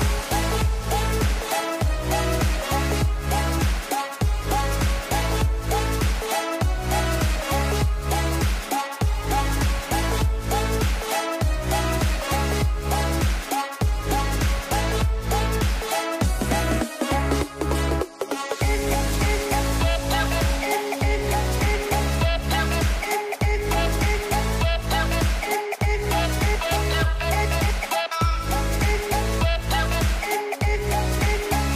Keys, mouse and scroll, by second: 0.8 scroll down 1, 1.0 scroll up 2, 1.3 ctrl+r, 3.1 scroll down 1, 3.3 shift+middle click, 3.9 Tab, 4.7 click, 4.9 scroll down 2, 5.0 middle click, 6.0-6.5 scroll down 5, 6.1 middle click, 6.5 middle click, 7.1 a, 7.4 shift+middle click, 7.6-7.9 scroll up 5, 7.9 click, 8.1 shift+middle click, 8.8 Tab, 9.0-9.7 scroll up 2, 9.7 click, 10.2 c, 11.5 middle click, 12.0 KP_Decimal, 12.5 middle click, 12.8 c, 13.4 shift+middle click, 13.6 scroll down 3, 13.8 middle click, 13.9 c, 14.9 middle click, 16.0 s, 18.2 ctrl+z, 19.4 c, 21.0 s, 21.9 middle click, 22.8 ctrl+z, 23.8-24.9 middle drag, 24.9 g, 27.2-28.5 middle drag, 28.5 a, 29.8-31.3 middle drag, 31.3 c.